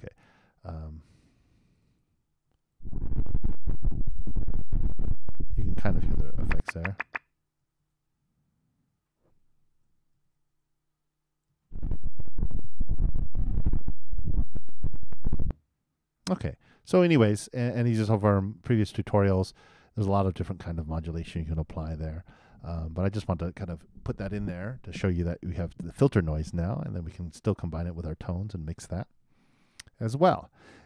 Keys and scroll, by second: 2.4 super+BackSpace, 2.7 super+Return, 7.8 super+Return, 10.1 super+Up, 10.2 super+Return, 11.0 super+Down, 11.6 super+Return.